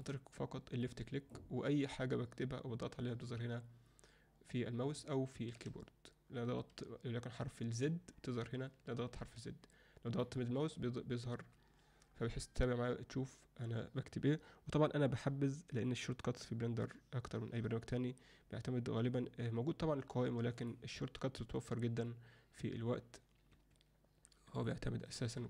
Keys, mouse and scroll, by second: 0.9 click, 5.6 a, 7.7 z, 10.3-10.7 middle drag, 20.7-23.5 drag, 24.6 click, 25.1 alt+middle click.